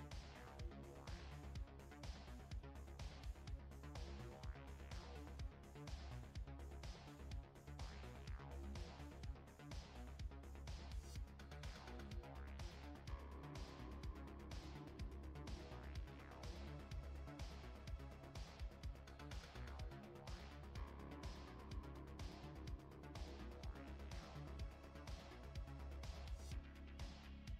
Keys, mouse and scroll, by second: 2.2 middle click, 5.4 click, 6.1 middle click, 7.6 KP_Decimal, 8.3 middle click, 13.0 x, 14.7 click, 16.1 x, 18.0 middle click, 19.5 shift+middle click, 21.0 scroll down 1, 21.5 middle click, 22.9-23.8 scroll down 3, 23.8 middle click.